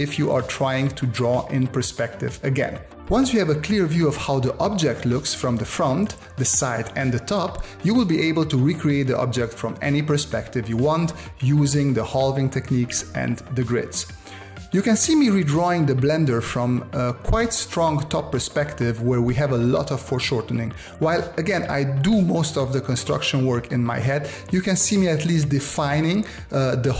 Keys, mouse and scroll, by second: 0.0 space, 0.6 space, 1.3 space, 4.1 space, 12.1 space.